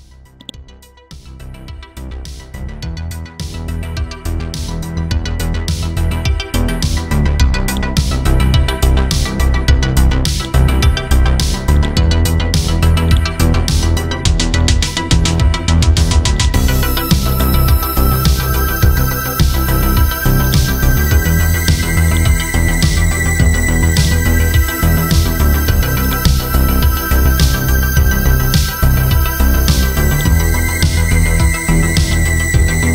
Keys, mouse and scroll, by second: 6.2-7.7 scroll down 1, 7.7 click, 8.2-10.4 scroll up 1, 10.4-13.0 drag, 13.9-14.6 scroll down 1, 14.6 click, 15.1-16.0 scroll up 1, 16.4 click, 18.6-19.3 scroll down 1, 19.3-20.4 scroll up 1, 20.4-26.0 drag, 26.7 click, 29.6-30.1 scroll down 1, 30.1 click, 31.2-31.8 scroll up 1, 32.0 ctrl+click.